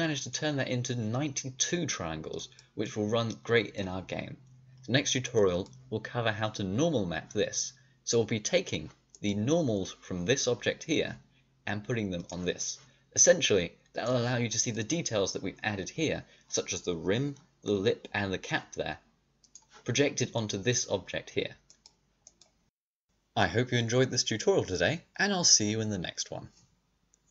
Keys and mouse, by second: 0.1-2.2 drag, 2.2 middle click, 5.3-8.5 middle drag, 9.1-12.1 drag, 14.5-19.4 drag, 20.1-21.2 drag, 21.2-22.6 middle drag, 22.6-24.4 drag, 24.8-27.3 middle drag.